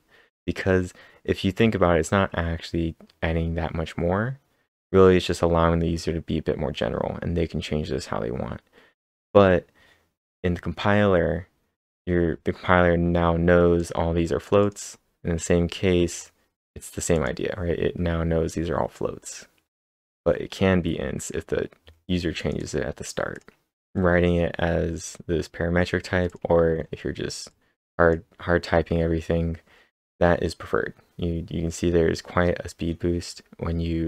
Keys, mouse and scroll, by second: 0.0-0.5 scroll down 1, 0.5-0.9 scroll down 3, 1.7-2.9 scroll up 5, 2.9-4.0 scroll up 3, 4.0-5.2 scroll down 4, 5.2 click, 8.8 click, 8.8 scroll down 1, 9.2-11.0 scroll down 4, 11.0-11.5 scroll up 1, 11.9-13.8 scroll up 8, 13.8 click, 14.6 double click, 15.0 scroll down 3, 15.6-16.2 scroll down 2, 16.2-16.9 scroll down 2, 17.1 click, 22.4 click, 22.4 scroll down 1, 22.6 double click, 23.3 click, 23.7 scroll down 1, 23.8-24.9 scroll up 17, 25.8 click, 26.3 click, 26.7-27.5 scroll up 3, 27.5-29.7 drag, 29.5-30.7 scroll down 8, 30.7 scroll down 4, 31.6-32.9 scroll down 5.